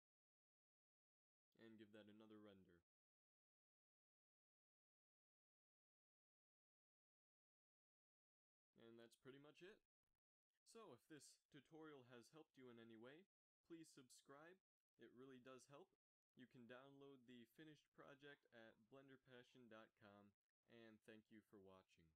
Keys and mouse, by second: 0.7 F12, 0.7 -, 14.6-16.2 drag.